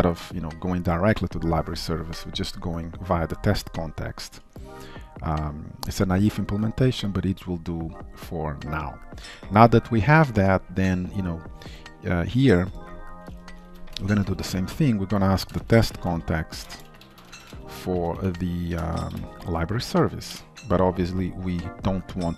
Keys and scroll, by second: 18.0 Return.